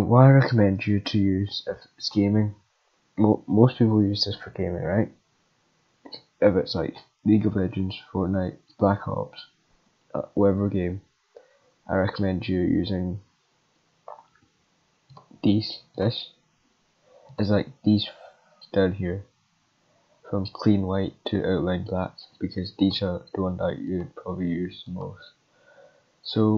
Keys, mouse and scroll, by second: 2.0 click, 15.9 click, 17.3 click, 22.8 click, 23.9 click, 24.8 click.